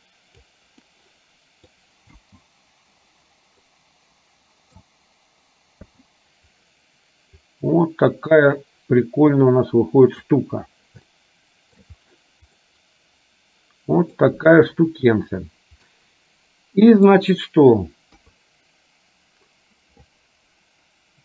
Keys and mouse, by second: 1.0 middle click, 2.2 space, 3.7-4.9 middle drag, 6.0 space, 7.5-10.4 drag, 11.2 shift+middle click, 12.9-14.4 middle drag, 16.1-17.2 middle drag, 18.2 KP_3.